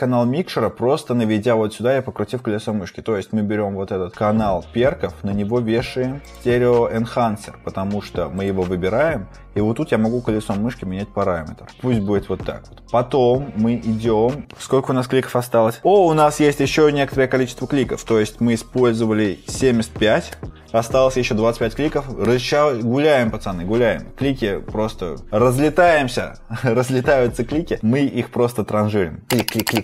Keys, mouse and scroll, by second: 18.5-19.0 scroll, 29.2-29.6 scroll.